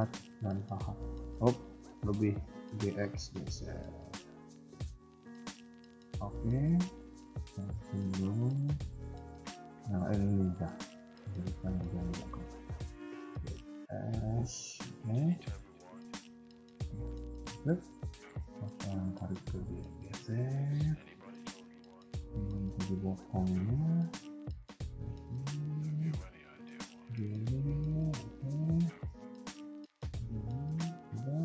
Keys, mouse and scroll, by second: 1.0 ctrl+z, 1.7 s, 2.6 g, 4.8 shift+middle click, 6.1 a, 6.2 a, 8.1 click, 8.7 b, 10.8 shift+middle click, 11.6 scroll up 1, 12.0 g, 13.3 s, 14.5 KP_3, 15.2 shift+middle click, 16.5 alt+click, 16.9 KP_1, 17.2 KP_3, 19.6 g, 24.4 s, 26.5 g, 27.9 KP_1, 28.7 scroll down 2, 29.0 shift+middle click, 29.5 g, 30.4 KP_3.